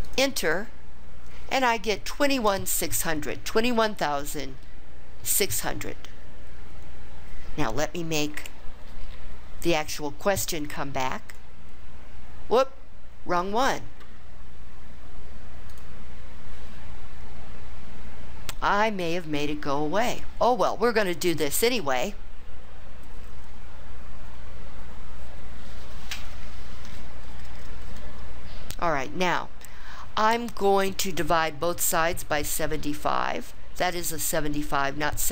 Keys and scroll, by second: 0.2 Return.